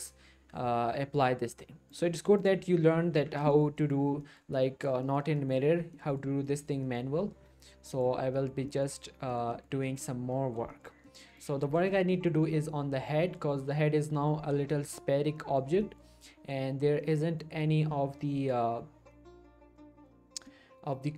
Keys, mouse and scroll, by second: 2.6 click, 3.1 Tab, 3.5 shift+middle click, 3.8 middle click, 5.0 shift+middle click, 5.2 scroll up 1, 5.3 middle click, 7.9 click, 8.3 middle click, 8.5-9.3 scroll up 2, 8.7 middle click, 9.3 middle click, 10.2 scroll down 1, 10.3 middle click, 10.6 scroll up 1, 10.7 shift+middle click, 11.4 click, 11.6 middle click, 11.9 shift+middle click, 15.4 middle click, 15.8-17.6 shift+middle drag, 19.4 middle click, 20.0-20.5 scroll up 1, 20.5-21.1 middle click.